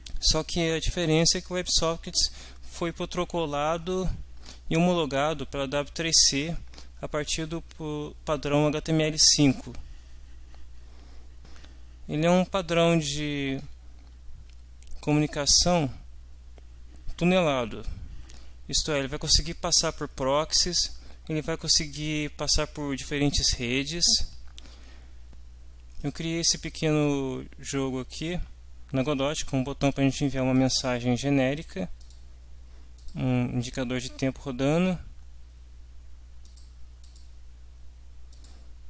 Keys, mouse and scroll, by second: 15.0 click, 25.3 middle click, 30.5 click, 32.0 click, 33.0 click, 36.4 click, 37.0 click, 38.3 click.